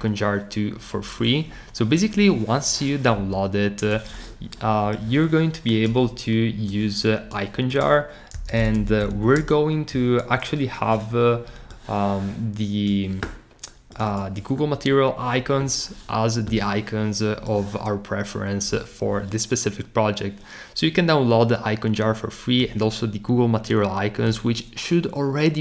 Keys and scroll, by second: 8.1-9.8 typing.